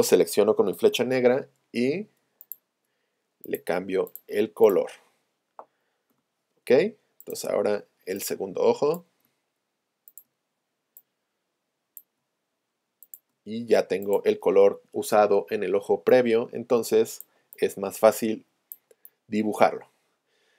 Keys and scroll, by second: 6.2 p.